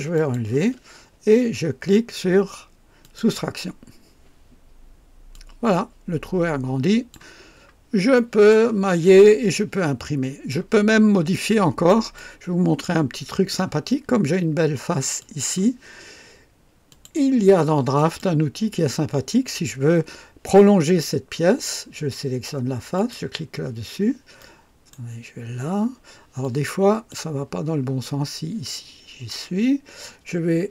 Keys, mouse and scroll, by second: 0.2 ctrl+click, 3.0 click, 5.3-7.3 drag, 7.4-7.7 scroll down 2, 8.1 right click, 9.5-10.7 drag, 11.4-12.1 right drag, 12.1-13.0 drag, 13.2-13.5 scroll up 2, 15.2 click, 16.9 click, 18.0 click, 22.9 click, 24.4 right click, 26.4-27.3 drag.